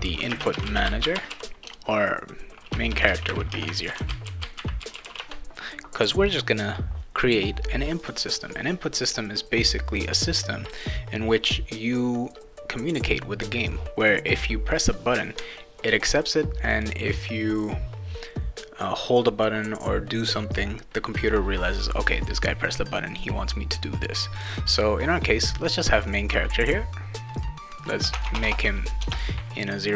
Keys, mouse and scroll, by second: 0.0-5.5 typing, 8.0 click, 9.9 click, 16.7 click, 25.8 right click, 27.1 click, 28.1 Tab, 28.3 Tab.